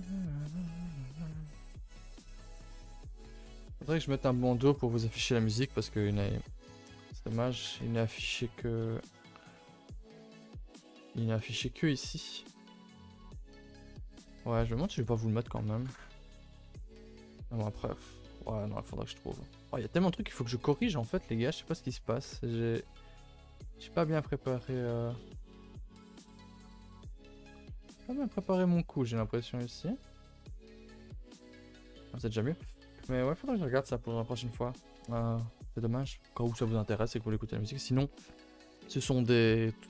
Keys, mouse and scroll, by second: 0.3 scroll up 2, 0.5 middle click, 1.1 g, 1.8 middle click, 2.3 click, 2.5 g, 3.4 a, 3.6 a, 3.9 ctrl+s, 7.2 a, 7.4 a, 7.7 ctrl+s.